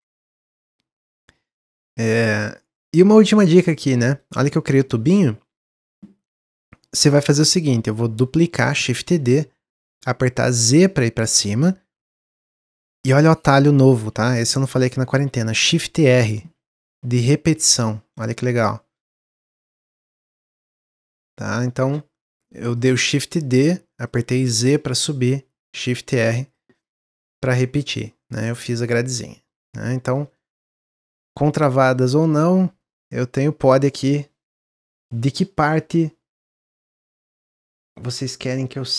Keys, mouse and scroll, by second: 0.1-3.4 shift+middle drag, 3.4-3.8 scroll down 1, 3.8-5.4 middle drag, 5.4-5.9 scroll up 1, 5.9 scroll up 1, 6.2-8.8 middle drag, 8.8 shift+d, 16.1-18.0 typing, 19.1 middle click, 19.6 shift+r, 20.2 shift+click, 20.8 shift+drag, 21.3 shift+drag, 21.7 shift+click, 22.2 shift+click, 22.7 shift+click, 23.2 shift+click, 23.9 shift+click, 24.3 shift+drag, 25.1 click, 26.6 click, 27.0 scroll down 1, 27.3-28.4 middle drag, 28.4-28.8 scroll down 3, 29.0-29.4 middle drag, 29.4-29.8 scroll down 1, 29.8-36.7 middle drag.